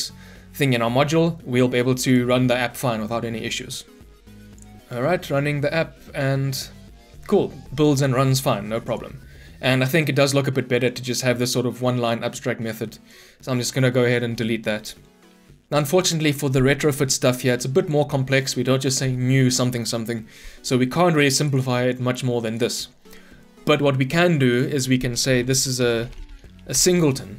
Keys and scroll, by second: 2.8 shift+F10, 14.2 Delete, 26.7 Return.